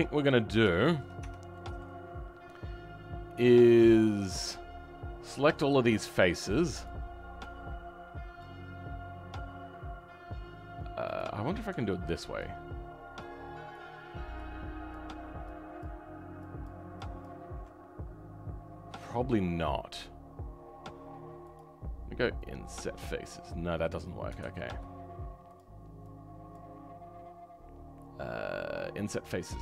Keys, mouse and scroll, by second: 0.0 scroll down 4, 0.3 scroll up 2, 0.7 shift+right click, 0.7 shift+middle click, 1.2 Tab, 1.5 right click, 1.5 middle click, 2.0 scroll up 2, 4.3-12.4 drag, 13.7 ctrl+click, 21.5 click, 24.4 ctrl+z, 25.5 click.